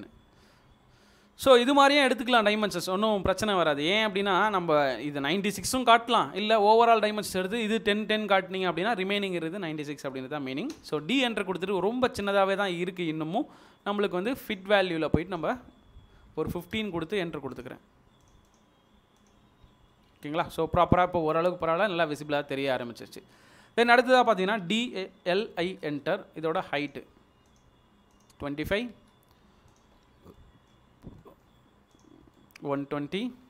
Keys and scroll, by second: 0.5 space, 11.0 typing, 16.3 typing, 24.6-25.5 typing, 27.1 space, 28.9 space.